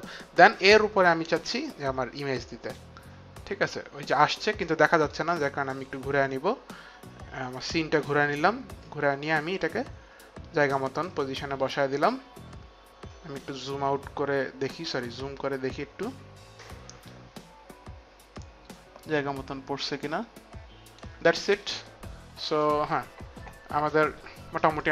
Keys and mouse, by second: 1.0 click, 5.1 right click, 8.7 click, 18.4 click, 24.7 click.